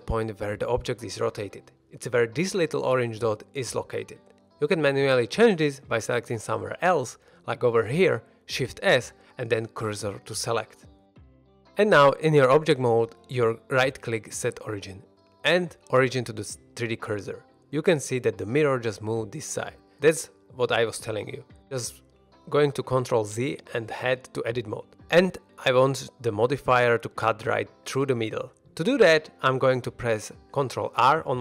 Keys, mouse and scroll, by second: 6.3 1, 7.5 click, 7.9 middle drag, 8.3 middle click, 9.7 shift+s, 11.2 shift+middle drag, 11.6 scroll up 2, 11.8 ctrl+Tab, 11.8 ctrl+middle click, 11.9 ctrl+Tab, 12.1 ctrl+Tab, 13.4-17.5 right drag, 23.1 ctrl+z, 23.8 shift+middle drag, 24.1 shift+middle drag, 24.7 ctrl+Tab, 25.2 middle click, 25.3 ctrl+Tab, 26.3 scroll up 1, 26.4 middle click.